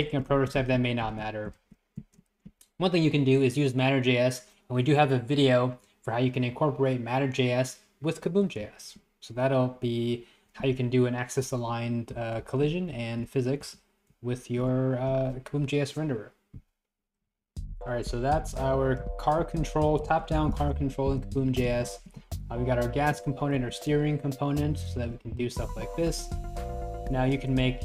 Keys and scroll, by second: 0.3 Right, 0.6 Left, 1.1 Right, 1.3 Left, 1.6 Right, 2.0 Right, 12.2 Up, 12.5 Left, 13.0 Right, 13.7 Left, 14.3 Right, 17.4 Up, 17.4 Right, 17.9 Left, 18.6 Left, 18.9 Up, 19.1 Right, 19.5 Left, 19.7 Right, 20.1 Left, 20.6 Right, 20.8 Left, 21.3 Right, 21.5 Left, 22.2 Right, 22.5 Left, 23.6 Right, 24.0 Left, 25.0 Right, 25.7 Left, 26.1 Right, 26.4 Left, 26.7 Right, 27.0 Left, 27.2 Right, 27.6 Left.